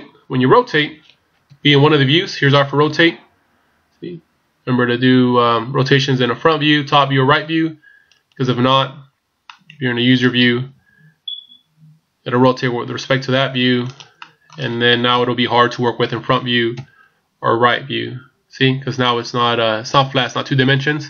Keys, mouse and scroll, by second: 1.4 KP_1, 2.9 r, 9.4 middle click, 10.7 r, 14.2 middle click, 15.1 KP_1, 16.7 KP_3.